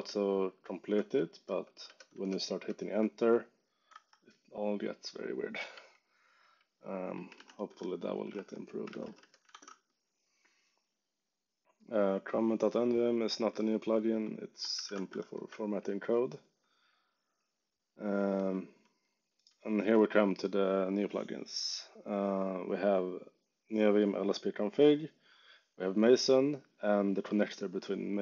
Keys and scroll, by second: 0.9 Return, 3.8 ↻, 5.7-9.5 typing, 14.5-15.5 typing, 17.5 j, 18.4 k, 19.0 j.